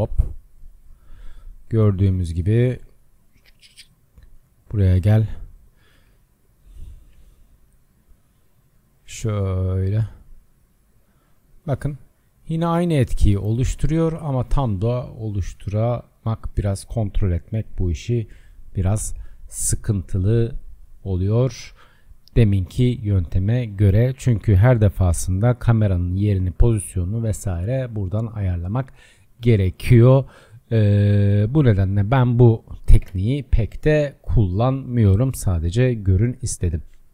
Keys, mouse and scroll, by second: 2.6 click, 5.9 g, 9.8 click, 11.0 click, 12.0 click, 19.4 click, 23.2-29.1 middle drag, 29.1-33.1 drag, 33.1 KP_0, 33.9-34.6 scroll down 7, 34.6-37.1 drag, 34.6 scroll down 1.